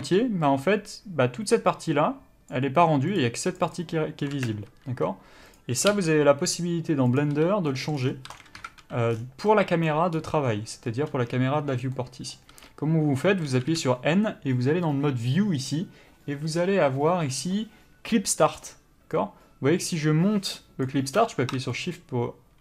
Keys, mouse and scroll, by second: 0.0 d, 0.7 click, 2.7 d, 3.3 click, 3.8 d, 5.2 ,, 6.1 n, 7.4 click, 7.5 n, 7.9 middle click, 8.2 scroll down 1, 8.5 a, 8.8 KP_Decimal, 9.3-9.7 scroll down 1, 9.7 middle click, 10.1 scroll up 1, 11.3-12.1 scroll down 1, 12.1 middle click, 12.7 n, 20.0 click.